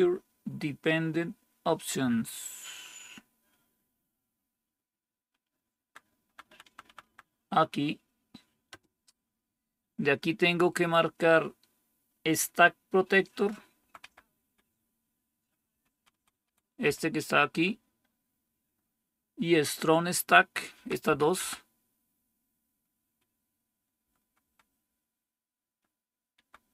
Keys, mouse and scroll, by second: 5.7 Down, 6.2 Down, 6.4 Down, 6.6 Down, 6.8 Down, 6.9 Down, 8.6 Return, 13.7 Down, 14.0 Down, 14.3 Down, 15.6 Down, 15.9 Down, 16.1 Down, 16.4 Down, 16.7 Up, 20.6 Down, 21.0 Up, 21.3 Down, 23.9 Down, 24.1 Down, 24.3 Down, 24.5-25.6 Down, 26.2 Down.